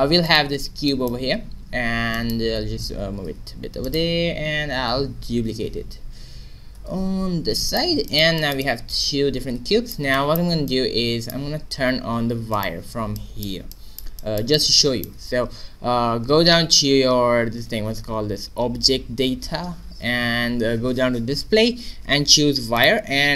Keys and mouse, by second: 2.9 g, 5.5 shift+d, 8.0-9.6 middle drag, 11.0 middle click, 12.5 click, 13.1 middle click, 13.7 click, 14.1 middle click, 14.6 middle click, 22.7-23.3 drag.